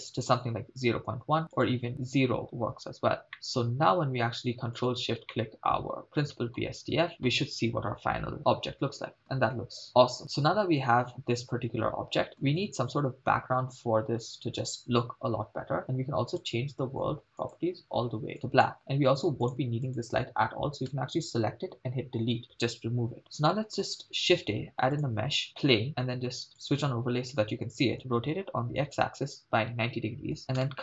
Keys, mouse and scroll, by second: 1.6 click, 3.3-4.0 middle drag, 5.0 ctrl+shift+drag, 5.3-6.6 middle drag, 9.4 shift+space, 12.5 shift+space, 16.3 click, 17.4 click, 19.4 click, 21.9 Delete, 24.0 shift+a, 26.7 click, 28.1-30.7 typing, 30.2 Return.